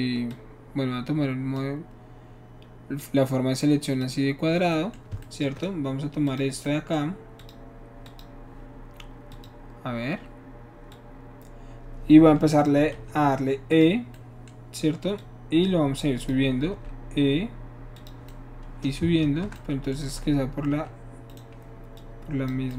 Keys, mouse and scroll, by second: 0.3-1.6 drag, 3.0-4.0 drag, 4.7 middle click, 6.3 shift+click, 6.7 shift+middle click, 7.4 shift+click, 8.1 click, 9.3 click, 10.9-12.7 drag, 13.1 e, 13.7 click, 14.2 middle click, 15.2-16.3 drag, 16.8 e, 18.0 click, 19.2 ctrl+z, 20.7 e, 21.3 right click, 22.0 click.